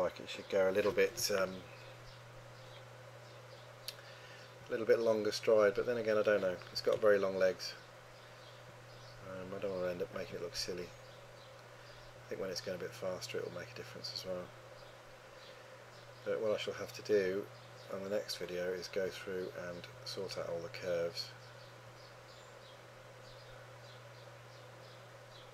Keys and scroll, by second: 6.8 3.